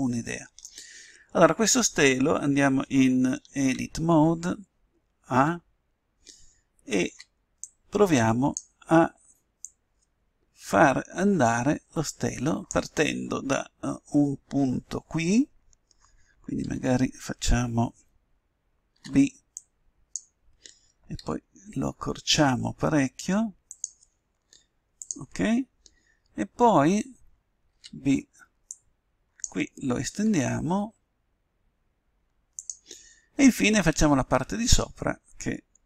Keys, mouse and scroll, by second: 3.6 Tab, 5.3 a, 7.0 b, 9.6-11.6 drag, 16.6 a, 18.9 b, 21.2 s, 25.0-26.8 drag, 26.9 a, 27.6 b, 30.1 s, 33.3-35.8 middle drag.